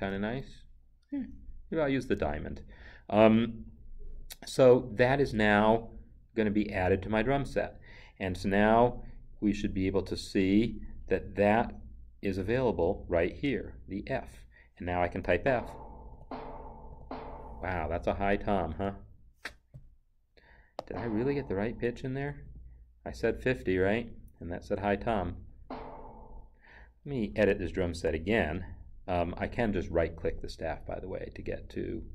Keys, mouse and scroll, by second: 0.1 Down, 1.3 Up, 5.7 Up, 15.2 f, 20.8 right click, 22.4 Escape, 28.0 n, 29.8 Escape, 30.4 right click.